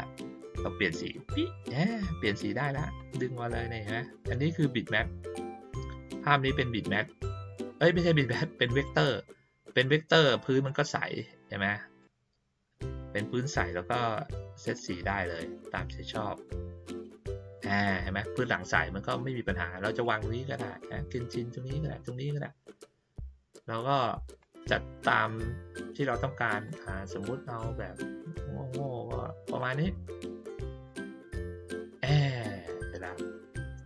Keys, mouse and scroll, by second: 1.0 click, 2.9-8.8 drag, 10.6 click, 12.0 click, 14.7 click, 16.4-17.5 drag, 20.0-23.5 drag, 24.4-25.7 drag, 26.6-27.7 drag, 29.6 click, 30.8 click, 32.9 click.